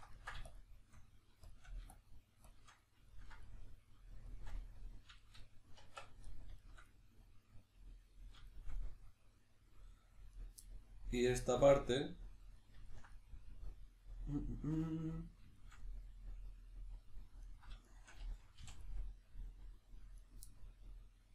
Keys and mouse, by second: 0.2 ctrl+middle click, 0.5 shift+click, 3.1-9.4 ctrl+middle drag, 5.8 b, 10.4 right click, 10.6-14.7 middle drag, 15.6-17.4 shift+middle drag, 17.4 right click, 17.8 shift+right click, 18.6 f, 18.8-20.2 middle drag, 20.2 right click, 20.5-21.3 middle drag.